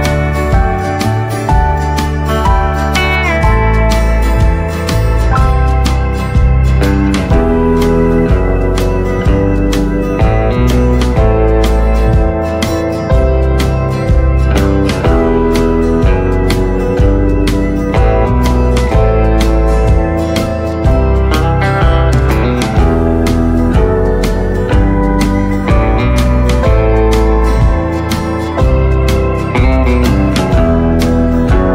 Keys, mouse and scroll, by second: 1.8 right click, 2.5-3.2 scroll up 2, 4.6 click, 7.4-8.2 typing, 12.0 click, 13.3-14.5 typing, 16.1 click, 17.1-18.1 scroll down 1, 18.4 click, 18.8-19.3 scroll down 1, 18.8 typing, 19.7 click, 20.1 right click, 21.1 scroll up 1, 21.6 right click, 22.1-22.4 scroll up 1, 22.6 click, 22.9 scroll up 1, 23.5-26.2 drag, 26.8-27.4 scroll down 1, 27.7 click, 27.7 typing, 28.1 scroll down 1, 29.4 right click, 30.5-31.1 scroll up 1.